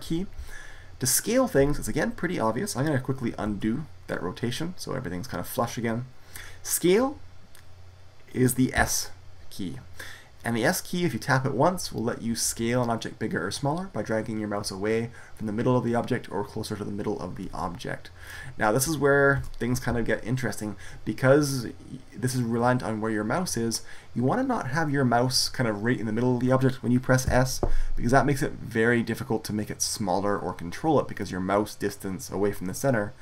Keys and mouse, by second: 3.4 ctrl+z, 8.6 s, 19.2 ctrl+z, 27.1 s.